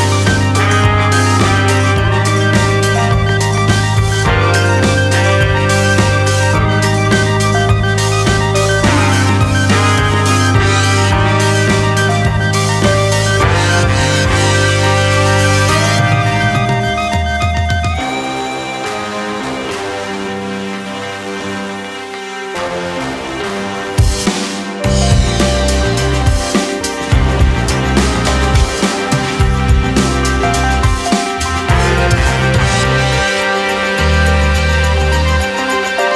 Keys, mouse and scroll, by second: 0.7-1.2 scroll up 2, 1.2-1.7 shift+middle drag, 1.7 click, 3.1 click, 4.1-6.4 drag, 6.4 middle drag, 6.5-6.9 scroll down 4, 6.9-7.6 shift+middle drag, 7.6 shift+right click, 9.1 shift+s, 9.4 scroll up 2, 9.6-10.3 shift+middle drag, 10.3 r, 11.5 scroll up 1, 11.6 middle click, 12.0 KP_7, 12.4 shift+middle click, 12.7 s, 13.3 g, 14.8 g, 15.5 r, 16.5 g, 17.0-17.4 middle drag, 17.4 g, 18.1 s, 18.6 middle click, 19.0 g, 19.6 middle click, 20.2-20.5 scroll up 1, 20.5 middle click, 21.2 KP_7, 21.5-21.9 scroll down 1, 21.9 r, 22.6 g, 24.4 scroll down 2, 24.6-25.9 shift+middle drag, 25.9 scroll down 1, 26.0 click, 26.2 middle drag, 26.3-26.6 scroll up 1, 26.6-27.0 shift+middle drag, 27.0 click, 27.3-28.2 middle drag, 28.2 shift+d, 29.4-29.7 middle drag, 29.7 s, 30.8 KP_7, 31.1 scroll up 2, 31.4 r, 32.2-32.8 shift+scroll up 5, 32.3 shift+middle click, 32.9 shift+middle drag, 33.2 g, 34.1 middle drag, 34.4 scroll down 2, 34.6 shift+middle click, 34.8 scroll up 1, 35.2 g.